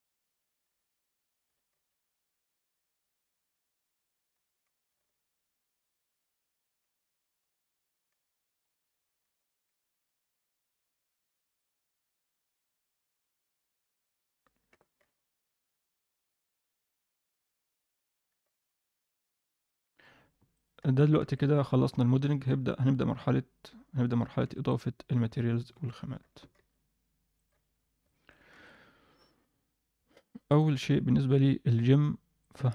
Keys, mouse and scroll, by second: 0.0 alt+middle click, 0.6 a, 1.4 s, 7.4 KP_1, 7.9 scroll down 2, 8.1 z, 8.5-9.1 scroll up 2, 8.9 a, 9.6 b, 10.8 b, 14.0 click, 14.7 g, 17.9 a, 18.7 v, 19.8 Escape, 20.5 click, 20.8 a, 21.9 b, 27.7 scroll down 1, 27.7 Tab, 28.0 middle drag, 28.5 alt+a, 30.1 middle click, 30.5 click, 32.3-32.7 drag.